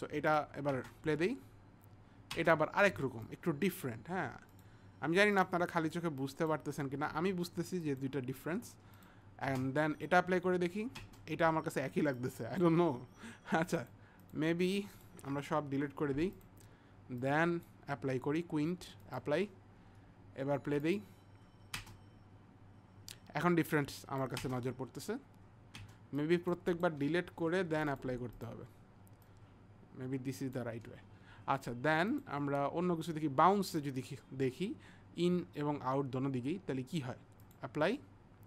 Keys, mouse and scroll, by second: 0.3 click, 3.3 click, 4.5 click, 6.3 click, 7.9 click, 9.0 click, 12.2 click, 14.3 click, 14.9 click, 15.7 Delete, 17.1 click, 17.2 click, 21.5 click, 23.8 click, 26.2 click, 26.8 click, 27.4 Delete, 27.9 click, 28.0 click, 28.4 click, 29.3 click, 32.1 click, 33.7 click, 37.4 click.